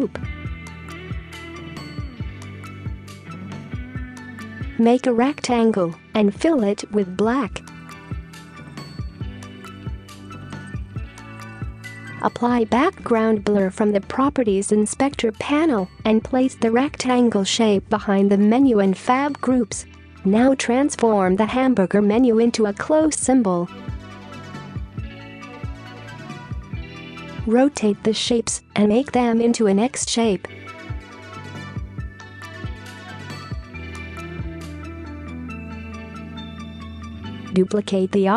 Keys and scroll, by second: 4.3 space, 19.5 space, 20.0 space, 24.3 ctrl+z, 35.4 space, 35.6 space, 36.8 space, 37.1 space.